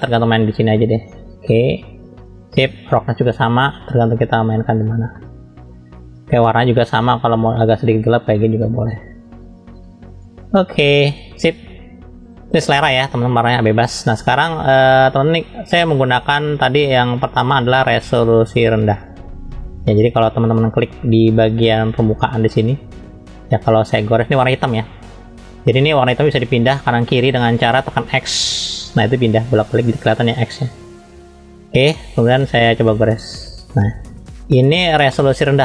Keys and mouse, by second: 3.1-4.7 drag, 5.1 middle click, 17.6 middle click, 20.4 middle click, 21.4 middle click, 22.2 shift+middle click, 28.6 x, 29.1 x, 29.4 x, 30.8 x, 31.1 x, 31.4 x, 33.0-34.1 drag, 35.2 middle click.